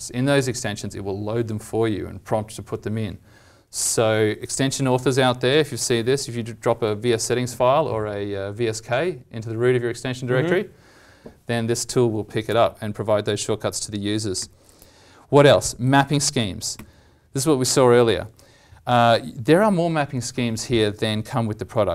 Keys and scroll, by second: 12.5 alt+t.